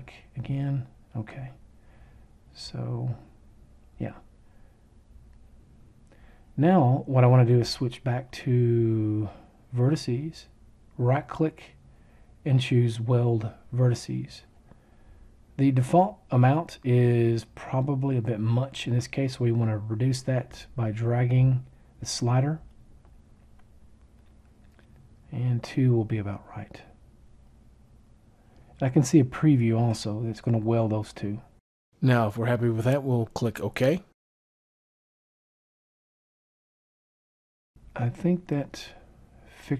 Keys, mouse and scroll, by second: 10.9-12.8 right drag.